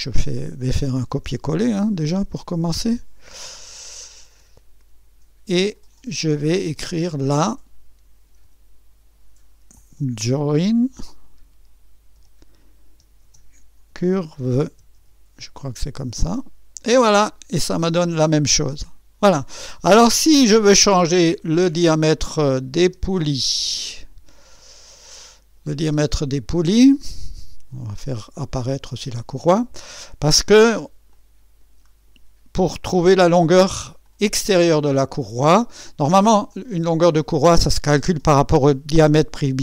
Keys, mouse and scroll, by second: 1.6 ctrl+c, 2.6 click, 4.2 ctrl+v, 6.2 click, 8.2 BackSpace, 8.3 BackSpace, 8.4 BackSpace, 9.9-16.0 typing, 20.5 click, 22.5 click, 22.8 space, 24.5 click, 24.8 typing, 25.7 click, 26.0 space, 28.8 click, 29.1 space, 30.0 click, 31.1 click, 34.0-36.1 drag, 36.5-37.5 drag, 37.9 typing.